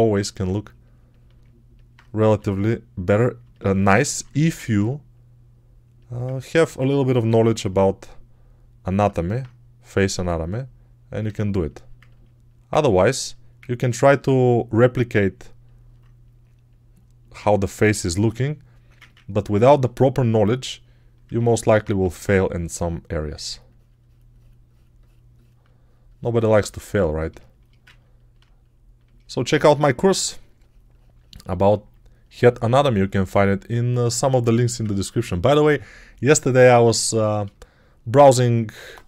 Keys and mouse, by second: 2.1 g, 21.8 2, 29.5 2, 34.4 1, 38.7 1.